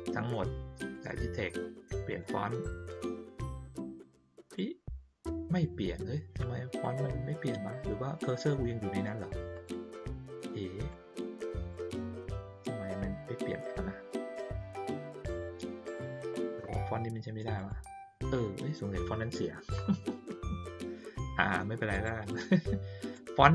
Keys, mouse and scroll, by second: 0.9 click, 2.1 click, 4.4 click, 6.8 click, 8.1 click, 9.5 click, 10.9 click, 13.2 click, 15.1 click, 17.5 click, 21.9 click, 23.1 click.